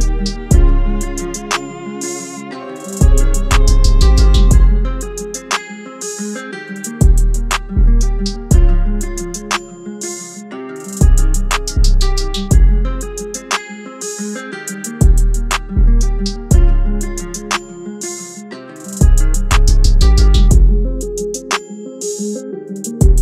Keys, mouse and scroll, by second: 10.8-12.0 scroll down 1, 13.7 ctrl+-, 14.1 ctrl+-, 14.9 ctrl+-, 15.1 alt+shift+click, 22.5 Return.